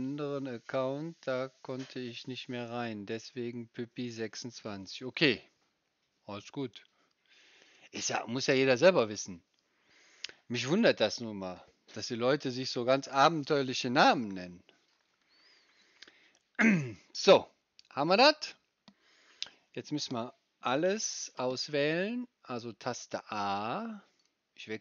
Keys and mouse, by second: 21.4-24.8 drag, 21.4-24.8 right drag, 21.4 a.